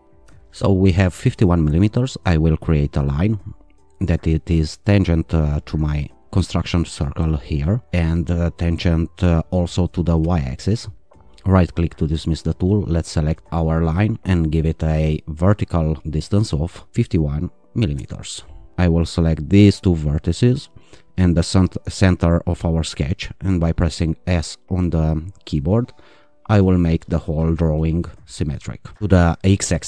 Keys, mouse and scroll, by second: 0.2 ctrl+r, 2.6 click, 7.6 click, 10.3 click, 11.1 right click, 12.7 click, 16.0 click, 16.7-17.5 typing, 18.0 Return, 19.0 click, 20.6 click, 22.7 click, 25.5 s.